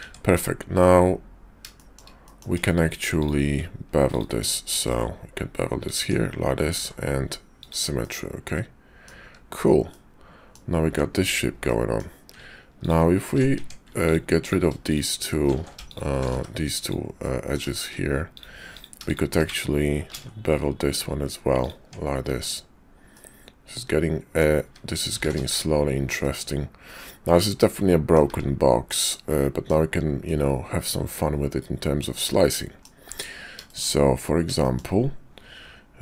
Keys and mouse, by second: 0.0 Tab, 1.8 shift+click, 2.2 click, 2.6 Tab, 4.1 ctrl+click, 4.8 ctrl+b, 6.0 Tab, 6.7 alt+x, 7.6 click, 8.0-9.1 drag, 9.2 `, 9.9 click, 10.8 Tab, 11.6 click, 13.5 Tab, 15.5 ctrl+z, 16.2 x, 17.2 middle click, 17.7 shift+click, 18.4 click, 20.1 ctrl+b, 21.8 Tab, 23.1-24.4 middle drag, 25.5 `, 26.2-28.2 middle drag, 28.3 `, 29.0 middle click, 30.2-32.8 middle drag, 33.7 shift+middle click, 34.5 shift+middle click.